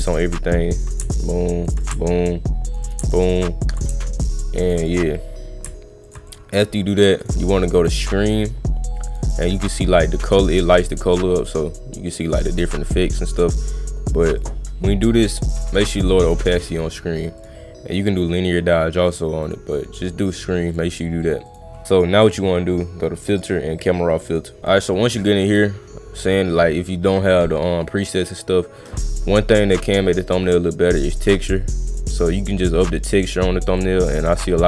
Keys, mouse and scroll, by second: 0.7 alt+click, 0.8 click, 1.6 alt+click, 1.8 click, 2.6 alt+click, 2.8 click, 3.6 alt+click, 3.8 click, 4.6 alt+click, 4.8 click, 6.1 alt+click, 6.3 click, 7.2 click, 8.2 click, 9.1 click, 9.5 click, 10.0 click, 10.2 click, 10.7 click, 11.4 click, 12.1 click, 12.6 click, 14.4 click, 15.2 click, 15.9 click, 16.2 click, 16.4 click, 17.4 click, 19.4 click, 20.3 click, 20.7 click, 21.2 click, 21.4 click, 21.9 click, 23.3 click, 24.3 click, 30.7-31.9 drag, 32.6 click, 33.7 click.